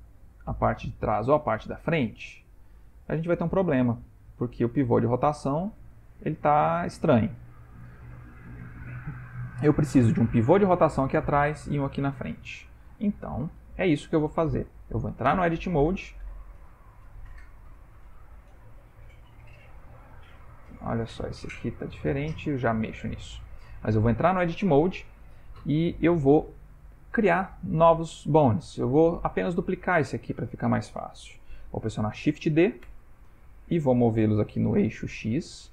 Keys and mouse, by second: 0.9 click, 2.6 click, 3.6 r, 12.7 ctrl+middle click, 15.4 Tab, 16.7 Tab, 17.4 Tab, 18.0 Tab, 18.6 click, 19.2 Tab, 20.6 Tab, 21.2 Tab, 21.8 Tab, 23.4 click, 23.8 Tab, 25.5 shift+middle click, 26.3 click, 32.9 shift+d.